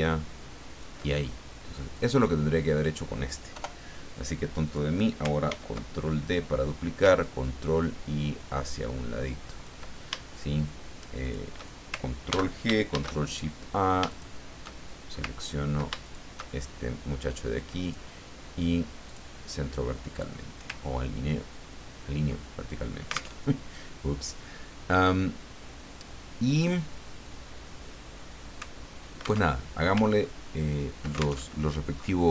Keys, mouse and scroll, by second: 1.9 click, 2.8 click, 3.6 Delete, 4.7 click, 5.5 ctrl+d, 7.2-9.9 ctrl+drag, 11.2 shift+click, 12.3 ctrl+g, 12.9 ctrl+shift+a, 14.1 shift+click, 15.4 ctrl+scroll down 2, 16.0 ctrl+shift+click, 17.8 click, 19.1 click, 20.1 click, 20.9-21.2 ctrl+scroll up 2, 21.5 ctrl+scroll down 2, 23.4 alt+Tab, 29.5 alt+Tab, 30.2-30.7 ctrl+scroll up 4, 31.5 ctrl+alt+Tab, 31.9-32.3 scroll up 4.